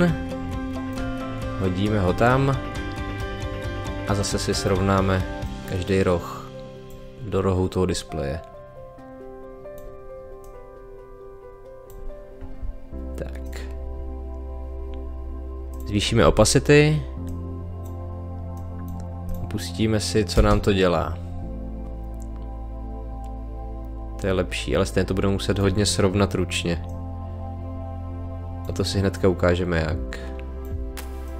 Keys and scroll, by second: 16.2 t, 20.3 space.